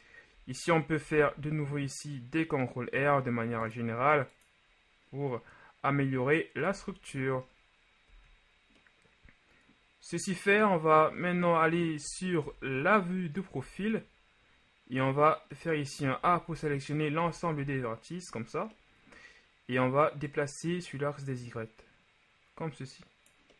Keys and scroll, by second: 1.1 ctrl+r, 6.9 a, 8.1 z, 12.5 ctrl+KP_3, 13.7 a, 16.3 a, 16.5 a, 17.3 a, 17.7 a.